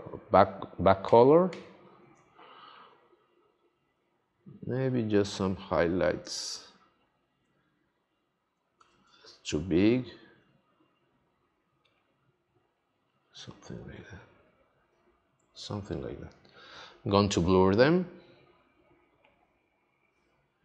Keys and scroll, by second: 1.0 x, 8.7 super+z.